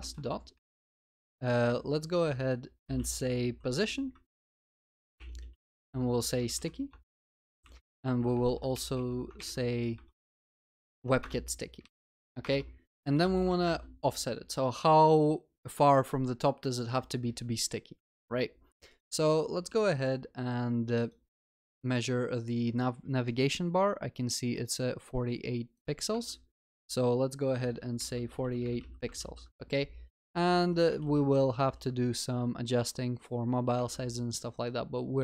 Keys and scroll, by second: 4.6 Return, 7.6 ctrl+c, 7.9 ctrl+v, 9.4 ctrl+BackSpace, 12.0 Return, 29.3 ctrl+s, 31.0 ctrl+alt+shift+l, 31.7 ctrl+s.